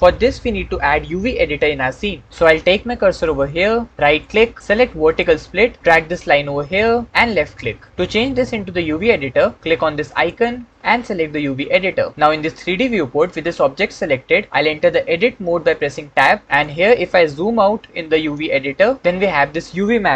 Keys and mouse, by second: 4.0-7.1 middle drag, 7.1 click, 10.1-11.6 middle drag.